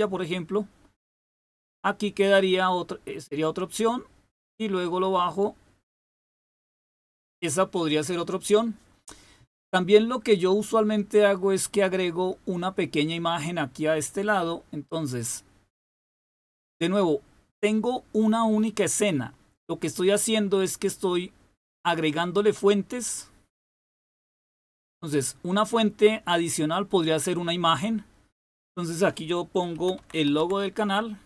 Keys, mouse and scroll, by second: 0.0 click, 2.6-6.7 drag, 7.7 click, 23.5 click, 26.5 click, 28.4 click, 29.5-30.9 typing.